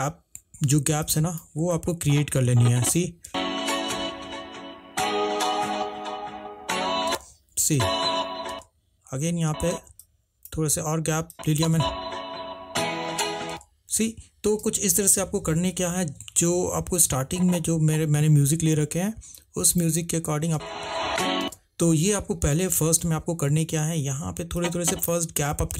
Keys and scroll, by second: 3.4 space, 7.3-9.8 typing, 11.8 space, 20.7 space, 21.8 space.